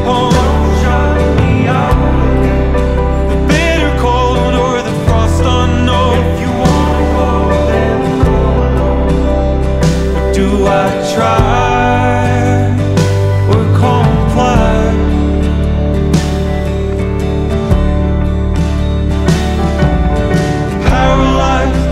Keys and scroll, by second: 0.2 super+z, 0.5 super+-, 1.2 super+=, 1.7 super+-, 2.0 super+=, 4.1 super+z, 4.3 super+-, 4.6 super+=, 5.0 super+-, 5.6 super+z, 5.8 super+z, 6.5 super+=, 8.4 super+-, 9.9 super+-, 10.8 super+-, 11.6 super+-, 14.4 super+z.